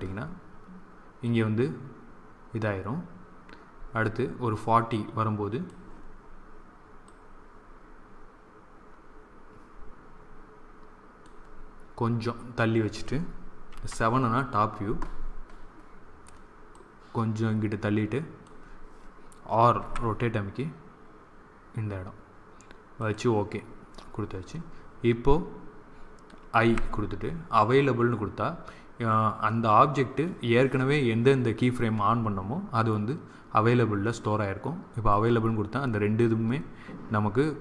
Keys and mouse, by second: 1.1-2.9 drag, 7.0-8.7 drag, 13.6 KP_7, 16.7 click, 19.9 r.